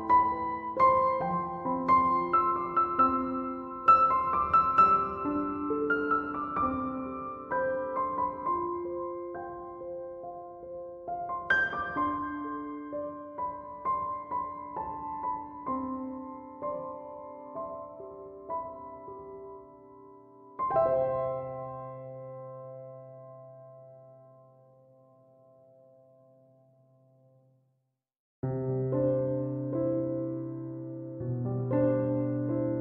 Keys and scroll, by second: 20.0 ctrl+7.